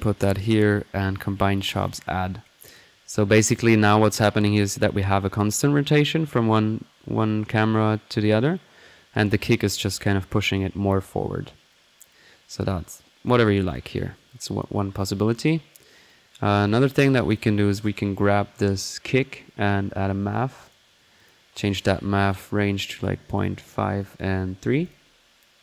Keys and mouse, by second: 1.0-1.6 drag, 1.8 click, 2.6 click, 11.7-12.3 right drag, 12.3 click, 13.2 click, 13.7 drag, 13.9 middle click, 14.4-14.9 drag, 16.1-17.1 right drag, 17.1 click, 17.3 drag, 17.6 middle click, 17.8 click, 19.2 middle click, 19.6-20.4 typing, 20.7-21.8 drag, 22.3 drag, 22.7-23.4 drag, 24.0-24.6 drag.